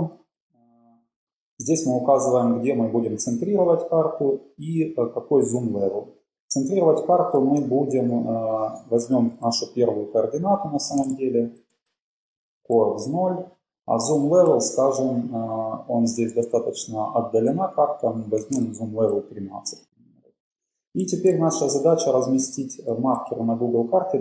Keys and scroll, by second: 1.0 Down, 2.5 Down, 6.3 Left, 6.5 Left, 7.3 Left, 8.5 shift+super+Right, 9.0 shift+Left, 9.3 typing, 10.4-13.0 typing, 13.2 Right, 13.6 Left, 14.7 BackSpace, 18.4 1, 21.0 super+Left, 21.6 shift+Down, 21.9 typing, 23.1 shift+Left, 23.6 shift+Up.